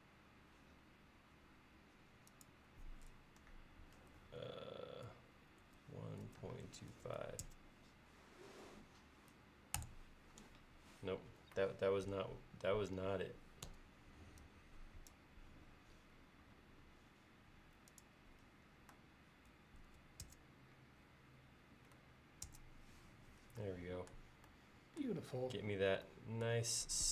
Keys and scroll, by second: 5.7-7.5 typing, 9.8 Return, 13.8 Escape, 19.9 typing, 20.3 Return, 22.5 Return.